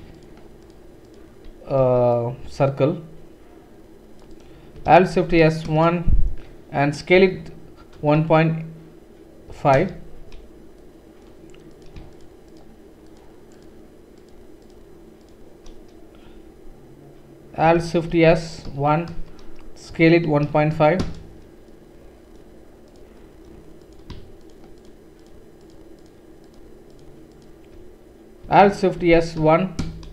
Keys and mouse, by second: 0.2-1.6 shift+drag, 1.8 c, 5.1 alt+shift+s, 7.1 s, 12.1 shift+click, 14.2 shift+click, 15.6-24.4 middle drag, 18.1 alt+shift+s, 19.9 s, 22.9 click, 24.4 shift+click, 24.5 shift+middle click, 24.8-26.5 shift+drag, 26.5 shift+middle click, 27.3 shift+click, 27.4-30.1 shift+middle drag, 29.0 alt+shift+s.